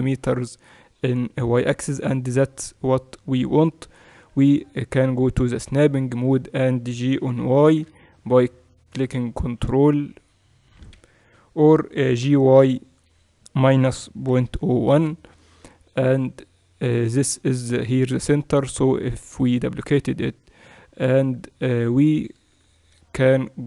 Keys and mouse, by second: 7.2 g, 12.1 g, 15.9-20.8 middle drag, 20.8 Tab, 22.1-23.6 middle drag.